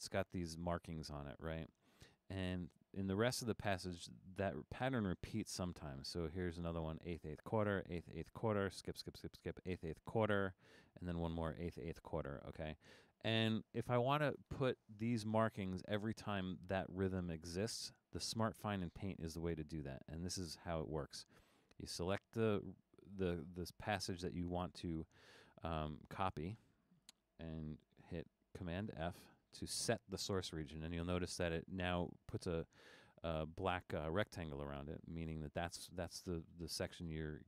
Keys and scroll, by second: 28.7 super+f.